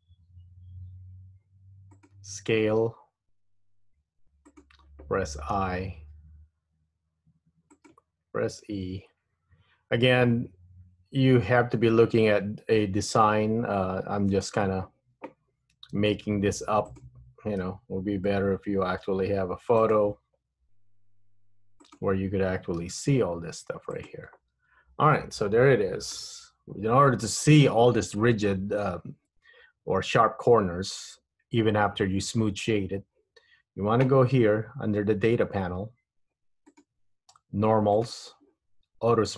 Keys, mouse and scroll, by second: 2.8 s, 5.7 i, 8.8 e, 16.1 e, 17.7 s, 21.1 i, 23.0 e, 24.7 Tab, 25.3 middle click, 36.8 click, 38.1 click.